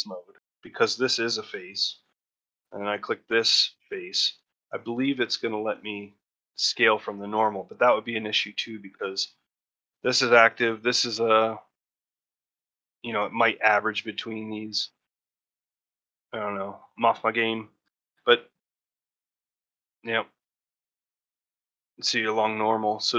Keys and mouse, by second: 0.5 click, 0.9 middle click, 1.8 shift+middle click, 2.0 middle click, 3.4 shift+click, 3.9 middle click, 4.3 shift+middle click, 4.7 middle click, 9.1 middle click, 12.9 middle click, 14.0 middle click, 15.1 middle click, 17.7 middle click.